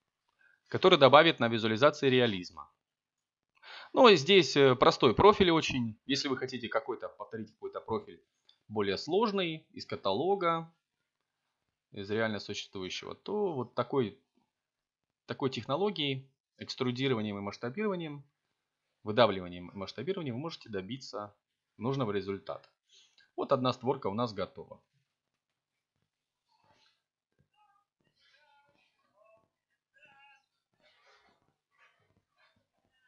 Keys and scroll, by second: 1.0 z, 17.5 a, 20.0 Tab, 22.6 z.